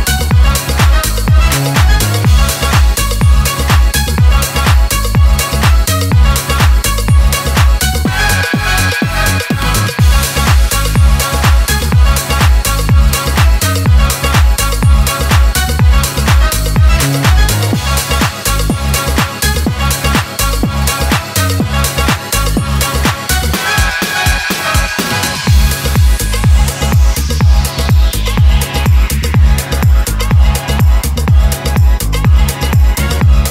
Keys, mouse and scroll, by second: 6.3-7.1 scroll down 2, 7.5 ctrl+space, 7.9-8.3 typing, 9.3 click, 13.6-19.3 drag, 26.6-27.9 drag, 29.2-30.4 middle drag.